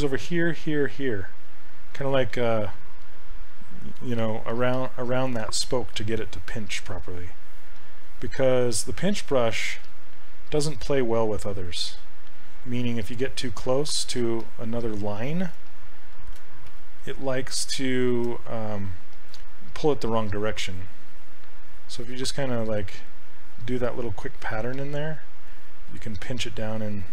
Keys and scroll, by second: 5.4 ctrl+z, 16.7 shift+f, 18.1 shift+f.